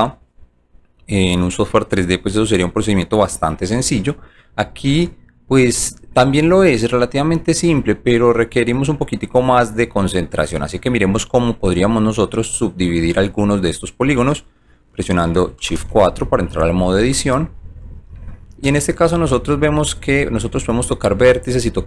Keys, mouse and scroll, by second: 5.0 alt+right click, 6.1 alt+middle click, 7.1 alt+right click, 8.0 alt+middle click, 8.7 alt+right click, 9.8 alt+click, 10.3 alt+middle click, 11.4-13.2 alt+drag, 13.4 alt+click, 16.7 shift+click, 17.5 shift+click, 17.9 click, 18.3-19.7 alt+drag, 20.8 click, 21.4 click.